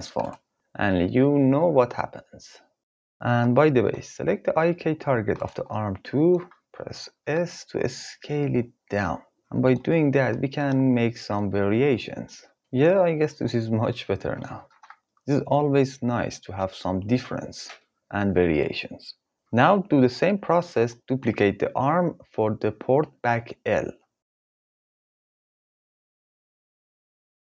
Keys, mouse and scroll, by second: 0.3 g, 3.5 click, 3.9-4.3 middle drag, 5.4 s, 8.3 middle click, 11.3 r, 12.6 ctrl+s, 19.3 ctrl+z, 20.5 click, 22.2 shift+d, 25.4 g, 26.2 click.